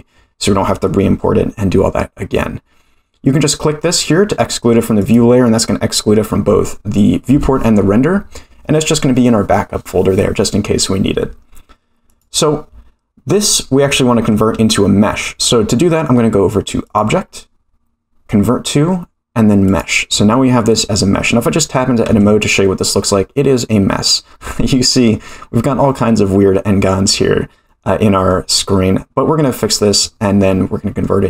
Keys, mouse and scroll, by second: 5.0 click, 12.1 click, 13.4-13.9 scroll up 2, 13.9-14.3 shift+middle drag, 16.8-19.8 drag, 22.1 Tab, 24.5-25.1 scroll up 4, 25.8 middle click, 26.7-27.6 scroll up 4, 27.6 middle click, 28.4-28.9 scroll down 4, 29.3-29.9 scroll down 1, 29.9-30.5 scroll down 1, 30.5 middle click, 30.5 scroll down 1.